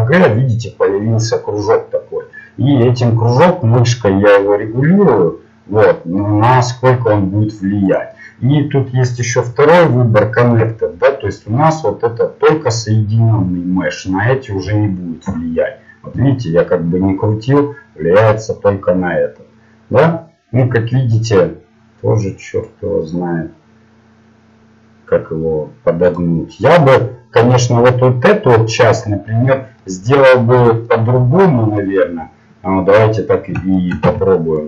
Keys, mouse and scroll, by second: 15.3 g, 26.5-34.0 middle drag, 34.0 z.